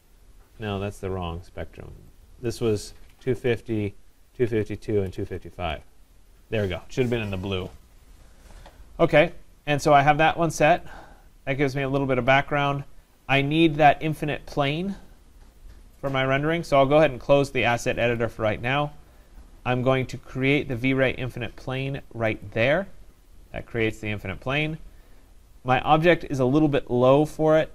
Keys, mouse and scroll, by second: 2.5 click, 2.9-4.0 typing, 4.5 Tab, 5.1 typing, 5.7 Tab, 10.9 click, 11.7 click, 18.2 click, 22.5 click, 25.9 click, 27.5 click.